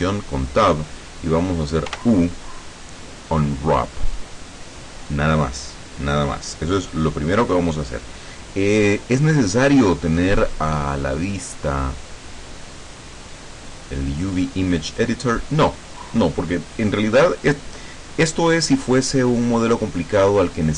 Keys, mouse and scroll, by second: 2.0 u, 4.2 click, 9.7-11.2 drag, 12.1 click, 13.8 click.